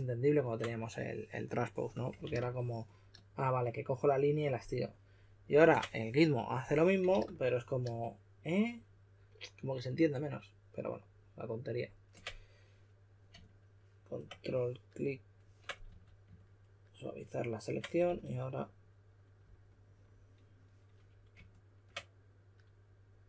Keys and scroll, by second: 2.2 super+a, 7.1 super+a, 15.8 q, 18.0 e.